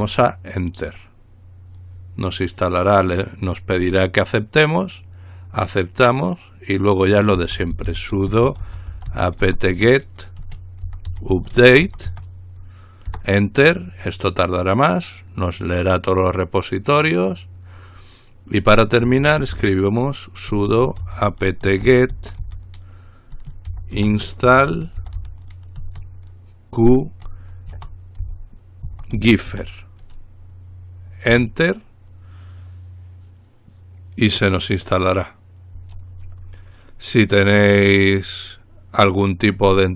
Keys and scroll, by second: 0.1 Return, 7.5-13.3 typing, 19.0-25.9 typing, 27.0-30.2 typing, 31.5 Return.